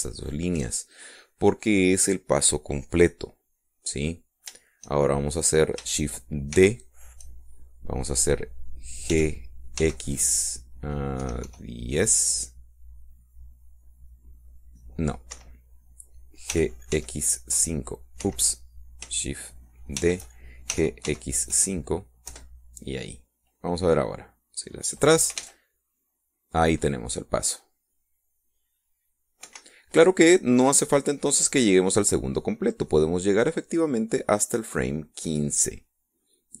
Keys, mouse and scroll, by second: 0.0 alt+shift+right click, 1.0 alt+shift+right click, 4.8-5.5 scroll down 3, 7.7 shift+d, 10.3 g, 11.0 x, 12.3 KP_1, 12.6 KP_0, 16.5 Escape, 17.7 g, 18.1 x, 18.7 KP_5, 19.4 Escape, 21.1 shift+d, 21.9 g, 22.2 x, 22.7 KP_5, 23.5 KP_Enter, 26.0 click, 26.6 alt+a, 30.6 Escape, 32.7 click.